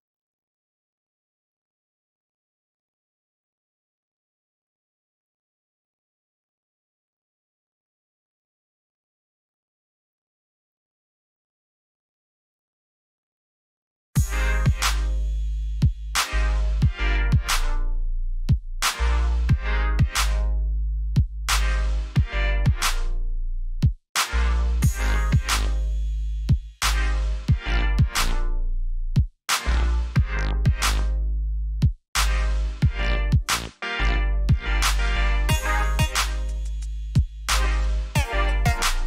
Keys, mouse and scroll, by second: 0.4 e, 2.0 click, 4.0 Escape, 5.5 v, 5.8 click, 7.6 alt+scroll up 1, 8.2 alt+scroll down 1, 10.1-11.2 scroll down 1, 11.4 shift+click, 12.6 ctrl+e, 14.2 alt+scroll up 1, 15.7 alt+scroll down 1, 16.6-18.4 scroll up 1, 18.4 click.